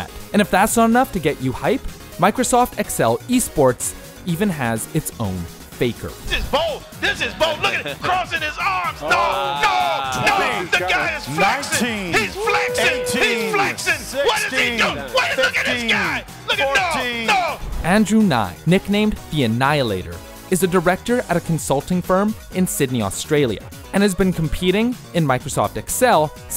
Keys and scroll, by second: 0.3 ctrl+Page_Up, 0.3 scroll, 1.4-1.8 scroll, 1.8 F9.